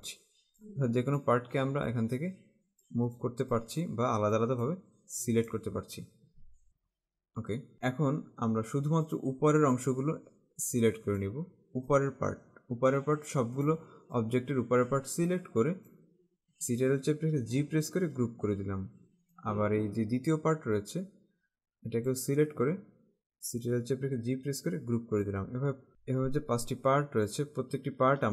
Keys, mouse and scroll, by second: 6.4 ctrl+z, 6.7-7.2 typing, 7.7 click, 9.2 click, 17.7 ctrl+g, 19.4 click, 24.3 g, 25.3 click, 26.3 click.